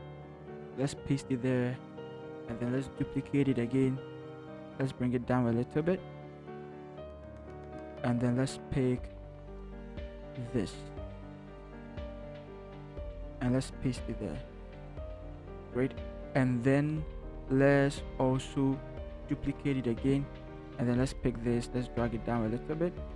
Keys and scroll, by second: 0.5 ctrl+v, 2.8 ctrl+j, 6.5 shift+Down, 6.8 shift+Down, 7.1 shift+Down, 11.1 ctrl+c, 13.1 ctrl+v, 19.4 ctrl+j.